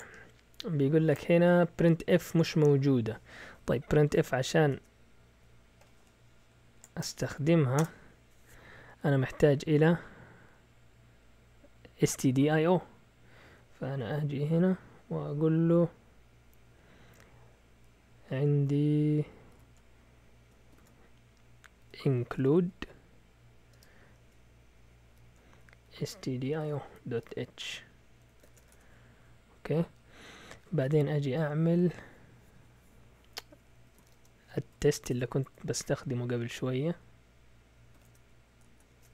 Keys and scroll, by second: 4.7 Return, 7.8 Return, 9.6 Up, 10.2 Up, 10.3 Up, 10.4 Up, 12.6 Left, 13.2 Left, 13.2 Left, 19.5 typing, 20.7 typing, 21.8-22.5 typing, 23.7 typing, 24.9-28.9 typing, 33.6-34.7 typing, 35.1 Caps_Lock, 35.4 Tab, 37.7-39.1 typing, 38.9 Caps_Lock.